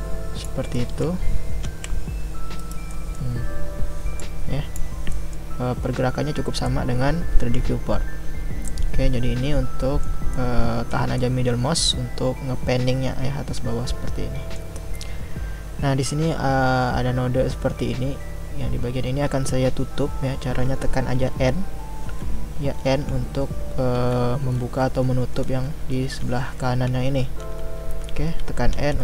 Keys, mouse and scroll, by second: 6.7-21.3 middle drag, 21.3 n, 22.0 n, 22.9 n, 24.0-28.7 typing.